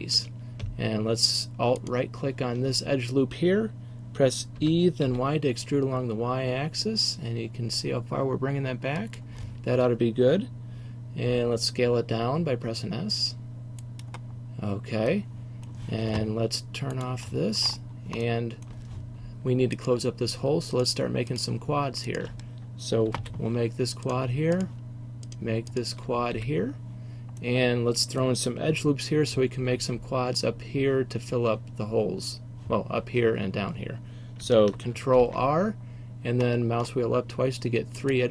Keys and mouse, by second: 1.9 right click, 2.1-4.7 middle drag, 4.7 e, 9.2-11.4 drag, 11.4 s, 14.1 click, 15.4 middle click, 17.0-18.7 middle drag, 23.2 f, 26.4 f, 35.3 ctrl+r.